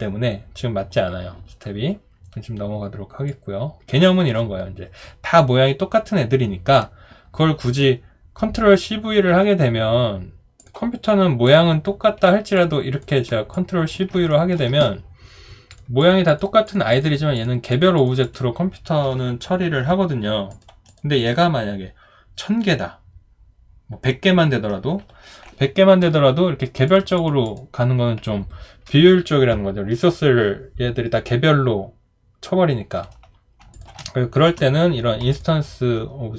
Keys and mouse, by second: 12.6 ctrl+click, 13.5 ctrl+click, 14.3 alt+middle click, 33.7 shift+click, 34.5 Delete.